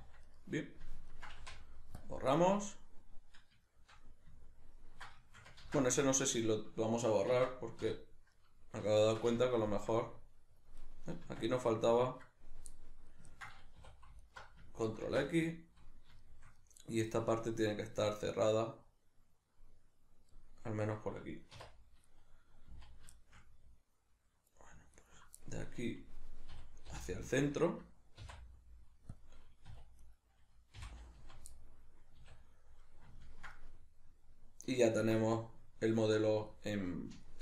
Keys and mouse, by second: 0.3 right click, 1.1 ctrl+right click, 1.4 x, 2.4-10.8 middle drag, 5.6 ctrl+z, 7.3 Tab, 7.8 \, 10.8 right click, 11.3 Tab, 11.7-14.2 ctrl+middle drag, 13.8 2, 14.2 alt+right click, 15.1 ctrl+x, 15.4-22.1 middle drag, 22.1 right click, 22.7 z, 23.2-25.0 shift+middle drag, 25.0 ctrl+right click, 25.4-29.2 middle drag, 26.6 e, 29.2 click, 29.7 2, 30.0 right click, 30.8 f, 31.6-37.4 middle drag, 32.2 a, 35.0 Tab.